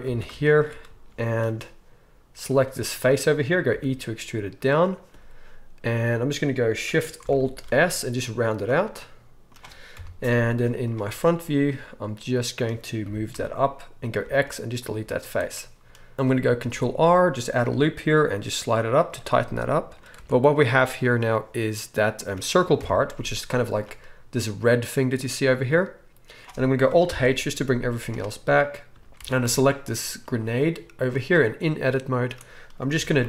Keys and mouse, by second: 0.0 alt+a, 0.0-7.3 alt+shift+right drag, 2.3 click, 2.3 middle click, 3.7 e, 7.3 alt+shift+s, 7.3-8.9 alt+shift+drag, 8.9-11.4 right drag, 9.9 KP_1, 10.4 z, 11.4-19.3 drag, 13.3 g, 14.2 x, 15.0 z, 16.6 ctrl+r, 19.3-31.1 right drag, 20.2 Tab, 22.8 KP_1, 23.1 z, 27.1 alt+h, 27.8 z, 29.2 Tab, 29.4 z, 31.1-33.2 middle drag, 32.9 g.